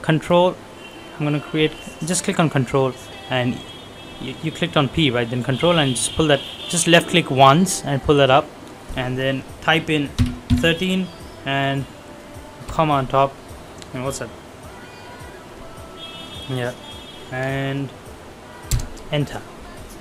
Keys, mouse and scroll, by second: 0.1 click, 12.6 ', 18.7 Return, 19.9 scroll down 1.